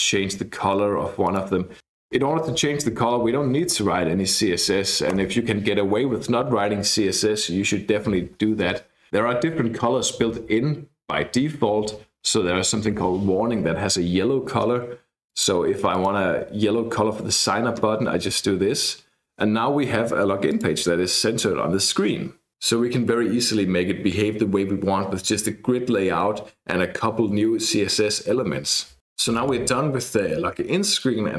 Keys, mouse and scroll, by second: 1.2 click, 1.8 BackSpace, 3.7-4.9 typing, 5.1 Return, 7.5-8.4 scroll down 2, 12.1-13.4 typing, 15.3 click, 15.9 click, 20.5 click.